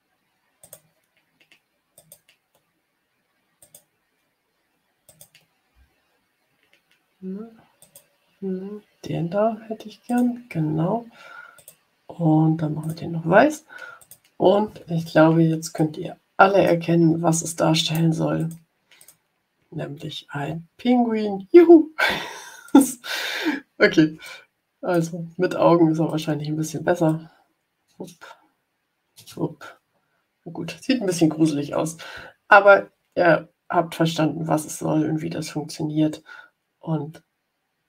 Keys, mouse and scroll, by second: 0.5 click, 1.9 click, 3.5 click, 5.0 click, 7.7 click, 10.0 click, 11.5 click, 12.7 click, 13.9 click, 15.7-16.8 drag, 17.7 right click, 18.3 click, 18.9 click, 22.6 click, 24.1 ctrl+shift+click, 26.0 click, 27.0-31.2 drag, 28.0 space, 29.1 space, 31.6 Delete.